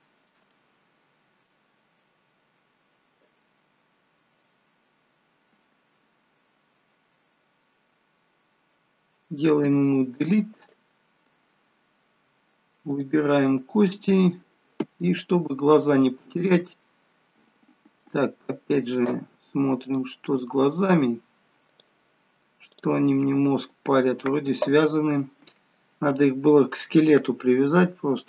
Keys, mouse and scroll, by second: 0.4 middle click, 9.5 Delete, 12.8 click, 13.6-14.5 scroll up 3, 14.1 middle click, 15.7 shift+middle click, 16.7-17.1 scroll up 3, 17.2 middle click, 19.7 click, 20.4 middle click, 21.6 click, 22.6 click, 23.1 middle click.